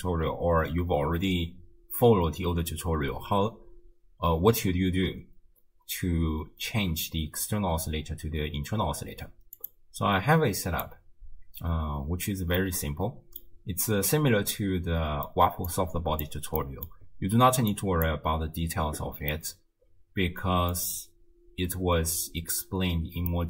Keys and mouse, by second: 9.6 click, 12.7-13.4 middle drag, 14.5 middle click, 15.7 click, 16.7 middle click, 17.8 click, 19.4-20.7 middle drag, 23.3 middle click.